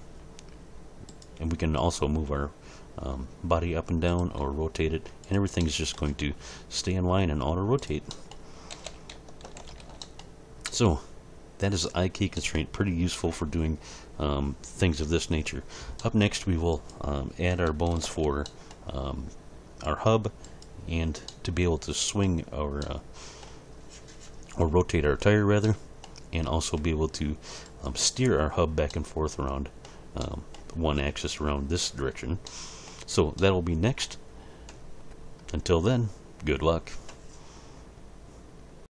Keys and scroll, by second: 2.1 g, 4.4 r, 6.2 r, 8.7 a, 9.4 alt+r, 9.6 alt+g, 9.8 alt+s, 18.0 alt+h.